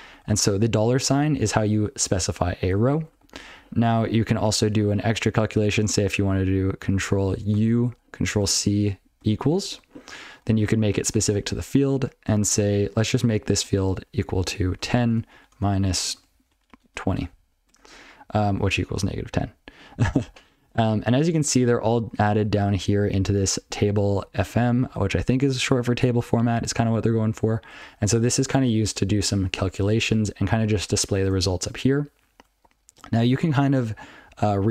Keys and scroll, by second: 0.3 ctrl+f, 0.9 ctrl+f, 1.1 ctrl+f, 3.0 ctrl+p, 3.1 ctrl+p, 3.3 ctrl+p, 3.5 ctrl+n, 4.0 ctrl+b, 4.3 ctrl+b, 4.5 ctrl+b, 4.7 ctrl+n, 7.5 ctrl+u, 13.6 1, 14.6-17.5 typing, 19.7 ctrl+f, 19.9 ctrl+f, 20.2 ctrl+n, 20.6-21.0 ctrl+f, 21.9-22.5 ctrl+alt+b, 23.3 ctrl+b, 23.5 ctrl+b, 23.7 ctrl+b, 24.0 ctrl+f, 24.3 ctrl+f, 24.5 ctrl+f, 24.8 ctrl+f, 25.1 ctrl+f, 25.5 ctrl+f, 25.8 ctrl+f, 26.2 ctrl+f, 27.1 ctrl+f, 27.8 ctrl+alt+f, 28.0 ctrl+alt+f, 30.0 ctrl+p, 30.1 ctrl+alt+f, 30.3 ctrl+p, 30.3 ctrl+b, 30.4 ctrl+b, 30.5 ctrl+p, 30.7 ctrl+p, 31.0 ctrl+n, 31.2 ctrl+n, 31.6 ctrl+n, 31.7 ctrl+f, 31.9 ctrl+f, 32.1 ctrl+p, 32.3 ctrl+b, 34.2 ctrl+n, 34.4 ctrl+n, 34.6 ctrl+n.